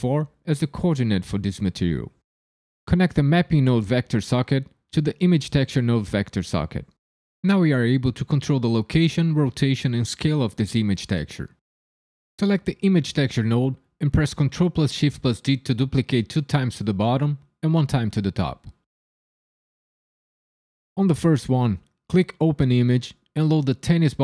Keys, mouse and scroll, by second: 4.2 click, 12.4 click, 14.3 ctrl+shift+d, 14.6 y, 16.2 click, 16.8 ctrl+shift+d, 19.0 click, 19.6 click, 19.9 ctrl+shift+d, 21.3 click, 22.4 click.